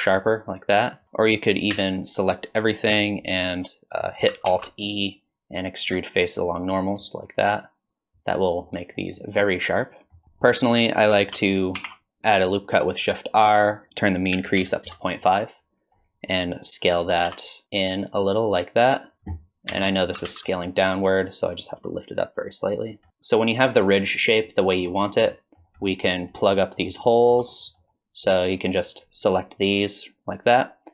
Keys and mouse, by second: 1.0 ctrl+z, 1.7 a, 4.5 alt+e, 8.1 click, 9.0 click, 9.5-10.5 middle drag, 11.8 ctrl+r, 13.9-15.4 drag, 17.3 s, 19.7 KP_1, 20.3 alt+z, 21.4-23.1 drag, 23.7 middle click, 24.5 middle click, 25.4 middle drag, 25.9 middle drag, 26.5 middle click, 26.8 middle click, 27.1 shift+middle drag, 27.6 middle click, 28.9-29.6 drag.